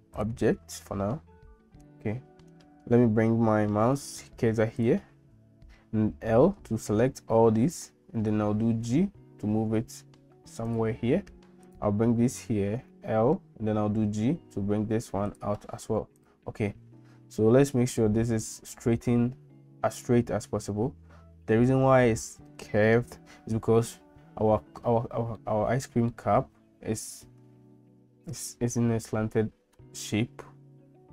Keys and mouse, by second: 6.4 l, 8.6 g, 11.6 click, 12.9 l, 13.8 g, 25.4 middle click.